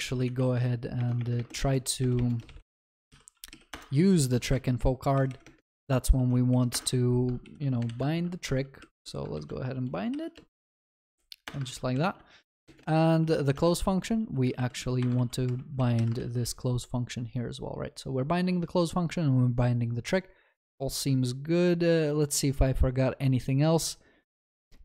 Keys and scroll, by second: 1.1 ctrl+BackSpace, 3.7 ctrl+BackSpace, 3.8 Return, 11.5 Return, 13.5 ctrl+s.